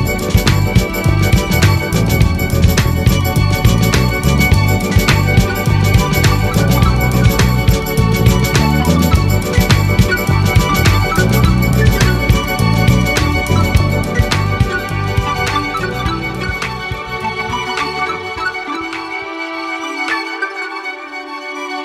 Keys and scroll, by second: 7.9 ctrl+a.